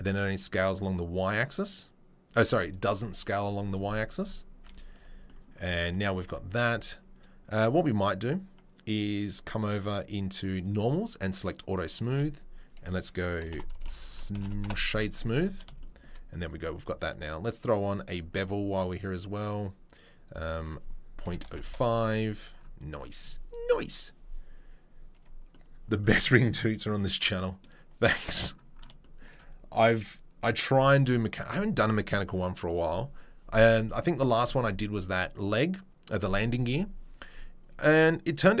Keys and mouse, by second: 4.9 Tab, 10.2-11.5 drag, 11.5-17.5 middle drag, 12.1 space, 17.5-18.0 drag, 19.0-23.0 drag, 23.0-38.6 middle drag.